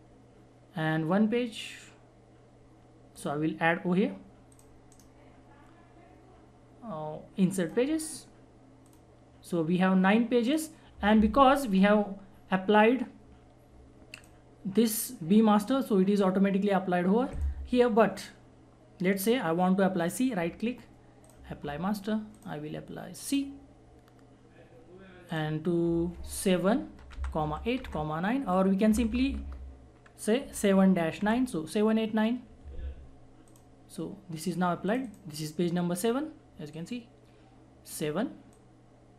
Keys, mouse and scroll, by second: 3.1 shift+click, 4.9 shift+right click, 7.6 shift+click, 14.1 shift+click, 17.3 shift+click, 20.1 shift+right click, 21.2 shift+click, 26.9-28.9 typing, 30.4 shift+-, 31.2 shift+9, 33.4-39.1 shift+drag.